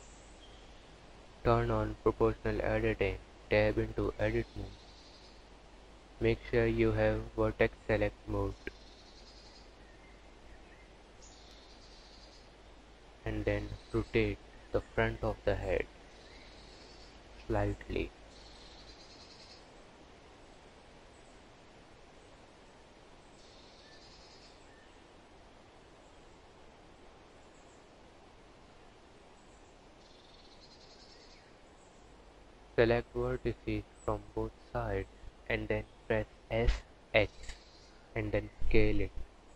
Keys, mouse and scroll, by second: 1.5 click, 2.2 Tab, 3.4 1, 5.4 click, 7.0 click, 8.3 r, 11.3 click, 12.0 r, 14.4 g, 15.9 click, 16.3 g, 18.1 click, 18.4 g, 23.9 click, 24.3 r, 28.3 KP_1, 29.7 click, 31.0 shift+click, 32.3 s, 36.4 click, 37.7 Tab, 38.1 click.